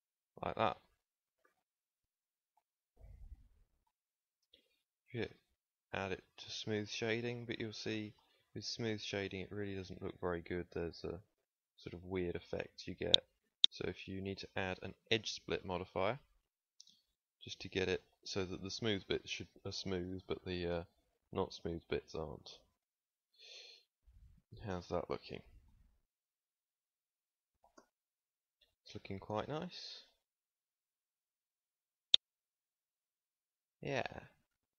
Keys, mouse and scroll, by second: 1.4 a, 2.0 a, 3.4 Tab, 3.9 middle click, 5.1-5.6 drag, 7.8 middle drag, 8.2 middle drag, 8.4-9.3 middle drag, 9.5 middle click, 23.6 KP_1, 27.7 KP_0, 29.4 shift+f.